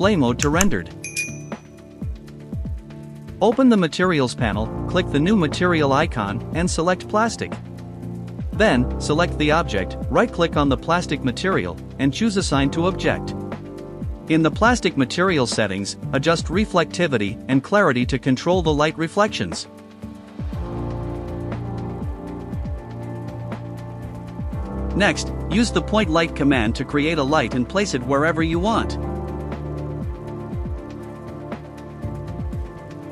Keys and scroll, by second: 21.9 ctrl+alt+s, 23.2-26.9 typing.